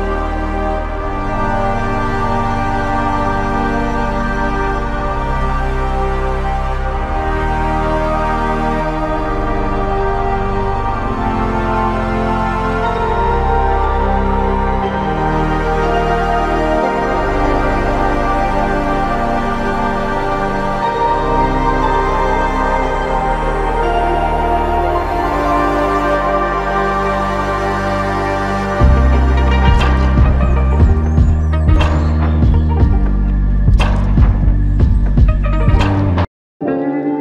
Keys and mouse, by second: 2.1 alt+click, 4.5 alt+click, 6.9 f, 7.7 alt+click, 13.7 f, 14.6 double click, 18.3 alt+click, 21.9 alt+click, 25.8 f, 26.7 shift+click, 33.8 alt+click, 36.3 double click.